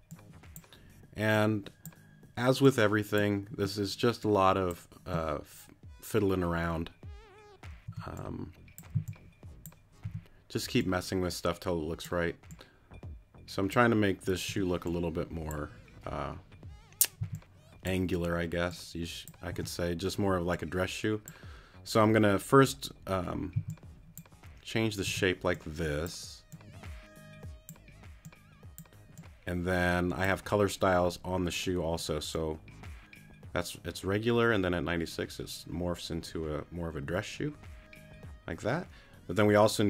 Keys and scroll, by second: 7.8 t, 9.8 c, 10.2 t, 14.5 t, 17.2 c, 19.5 t, 23.5 c, 25.1 t.